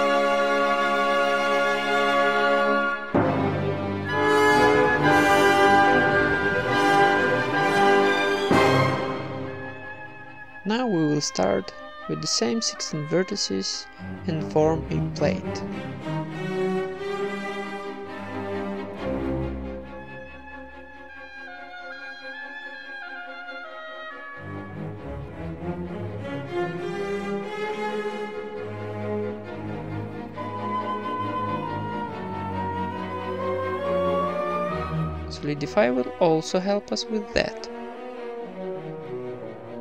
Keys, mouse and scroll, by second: 0.0 e, 0.4 alt+m, 1.1 ctrl+Tab, 1.5 right click, 1.6 alt+s, 2.1 Tab, 2.9 Tab, 3.2 ctrl+KP_Add, 3.7 alt+s, 4.4 ctrl+KP_Add, 5.2 alt+s, 6.1 right click, 6.4 ctrl+KP_Add, 6.7 alt+s, 7.1 Tab, 8.3 Tab, 8.9 middle click, 9.4 a, 9.5-11.1 right drag, 10.4 alt+s, 11.1 Tab, 11.1 middle click, 11.1-13.5 typing, 11.7 ctrl+Tab, 11.9 middle click, 12.5 right click, 13.7 Tab, 14.0 right click, 14.3 Tab, 14.7 a, 14.9 s, 16.0 click, 16.4 KP_1, 16.9 middle click, 17.6 s, 18.9 click, 19.1 e, 19.6 alt+m, 20.3-23.4 typing, 20.6-21.6 right drag, 23.8 click, 24.4 e, 25.2 KP_1, 25.5 g, 26.6 s, 27.9-30.4 typing, 28.9 scroll up 1, 29.9-31.2 right drag, 31.6 s, 32.6 Tab, 32.9 ctrl+s, 32.9-38.7 drag, 32.9 z, 32.9 a, 33.2 Tab, 38.3 KP_1, 38.8 z.